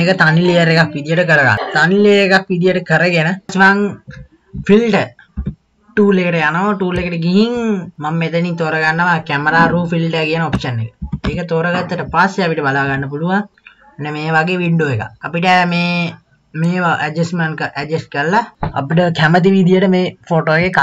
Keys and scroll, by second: 5.2 KP_3, 5.3 KP_2, 11.0 KP_2, 11.1 KP_3.